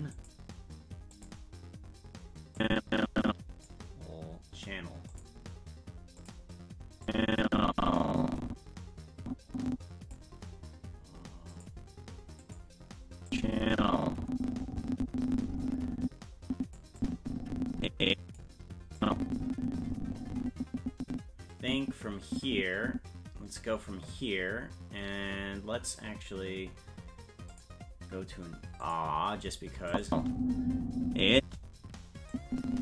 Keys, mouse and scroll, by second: 0.1 click, 1.1 click, 2.5-3.6 drag, 5.1 click, 6.1 click, 7.0-10.1 drag, 11.5 click, 12.4 click, 13.3-16.6 drag, 17.0-18.3 drag, 19.0-23.6 drag, 27.5 click, 28.8 click, 29.9 click, 30.1 space, 32.3-32.8 drag.